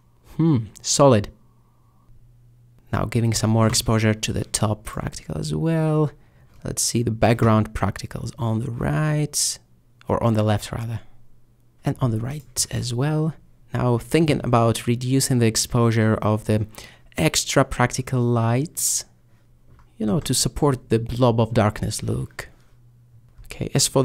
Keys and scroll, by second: 2.0 typing, 3.7 2, 5.4 4, 7.4 m, 8.1 m, 11.0-11.3 typing, 13.0 3, 15.3 3, 17.0 3, 21.8 5, 23.3-23.6 typing.